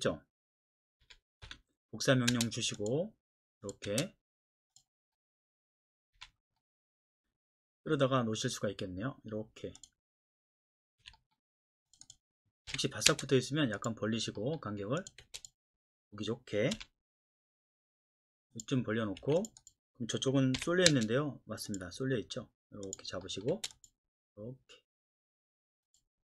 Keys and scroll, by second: 1.0-2.3 typing, 3.9 space, 6.1 F8, 11.0 Escape, 12.7 m, 13.1 space, 15.2 space, 16.7 F8, 19.2 Escape, 20.6 m, 20.9 space, 23.5 space.